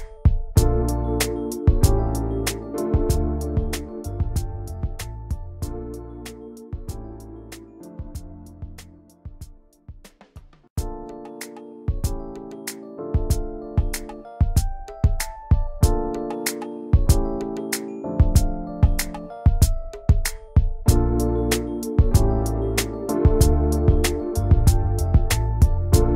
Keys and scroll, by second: 18.5 i, 19.0 v.